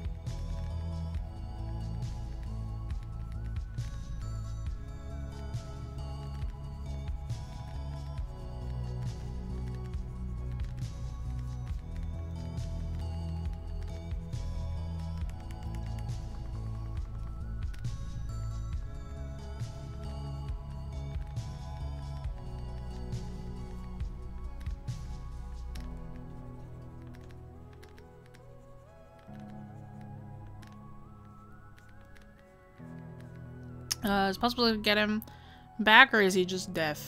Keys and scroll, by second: 15.2 scroll down 1, 16.4-17.0 scroll up 1.